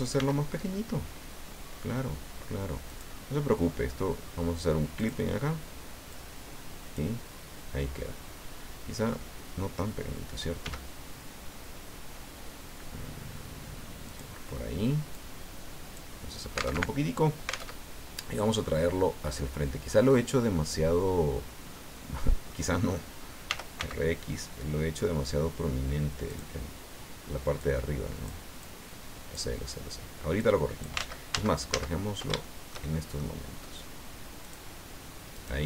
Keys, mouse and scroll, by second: 0.2 s, 2.9 click, 5.0 click, 6.1-7.1 drag, 7.7 scroll up 1, 10.6 s, 14.1 click, 15.1-16.1 drag, 16.3-16.7 scroll down 1, 16.7 alt+Tab, 17.7 alt+Tab, 18.3 scroll down 2, 18.6-22.7 drag, 23.5 r, 23.8 x, 26.3 click, 27.6 click, 28.6 click, 30.4 click, 31.0 ctrl+z, 32.5 ctrl+shift+middle click, 34.5 click, 35.3 right click.